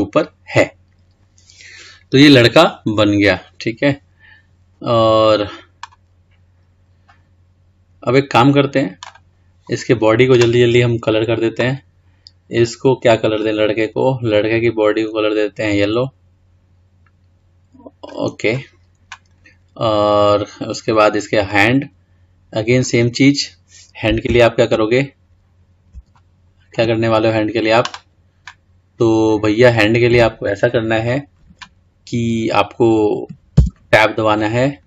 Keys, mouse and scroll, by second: 0.5-0.9 scroll up 5, 0.9-3.5 scroll down 4, 3.5-4.1 scroll down 2, 4.1-5.8 scroll up 2, 7.2 scroll down 1, 8.2 scroll down 1, 9.3-9.8 drag, 11.3-12.8 drag, 13.5 click, 19.6-20.1 scroll up 3, 20.1-21.6 scroll down 2, 21.6 click, 23.3-24.8 scroll up 1, 24.8-25.6 shift+scroll down 3, 25.6-26.3 scroll up 4, 26.3-27.2 shift+middle drag, 27.2-30.3 scroll up 2, 33.7 Tab.